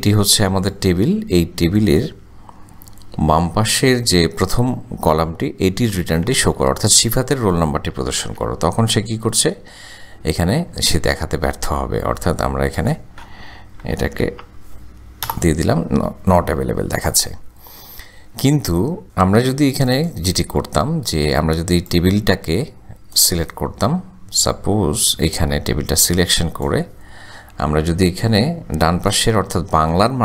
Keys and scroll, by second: 3.3 ,, 6.0 1, 8.2 shift+0, 13.9 ,, 14.4 0, 15.3 Return.